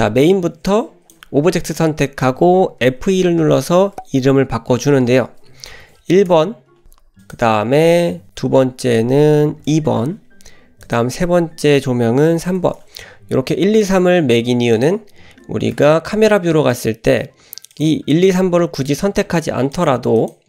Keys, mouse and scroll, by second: 1.0 click, 7.2 click, 10.8 click, 13.8 click, 14.7 click, 15.7 KP_0, 16.7 click, 17.7 click, 18.7 click, 19.7 click, 20.2 click.